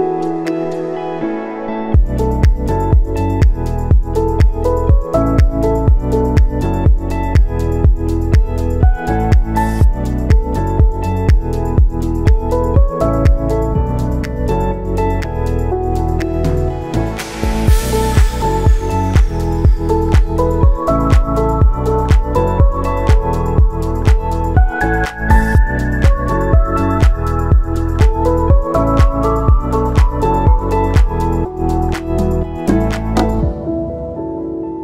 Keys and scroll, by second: 7.0 space, 8.7 ctrl+s, 14.8 space, 17.8 space, 19.5 ctrl+s, 22.1 space, 25.6 space, 27.3 space, 30.9 space, 31.3 ctrl+s.